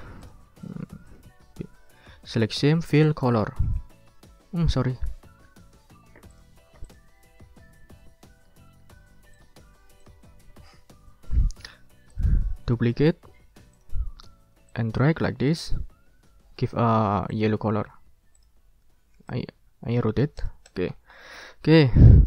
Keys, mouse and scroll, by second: 0.2 click, 0.6 click, 1.1 right click, 3.0 click, 3.4 ctrl+middle click, 3.8 ctrl+scroll down 2, 4.4 ctrl+scroll up 2, 4.7 ctrl+z, 6.3 ctrl+click, 6.9 click, 8.5 ctrl+z, 9.3 ctrl+click, 10.0 ctrl+click, 10.5 ctrl+scroll up 2, 12.1 right click, 13.7 click, 14.7 click, 17.3 click, 17.7 click, 18.4 click, 19.3-20.9 drag, 20.9 ctrl+scroll down 2, 21.1 ctrl+click, 21.9 ctrl+scroll down 2, 22.1 ctrl+scroll up 2.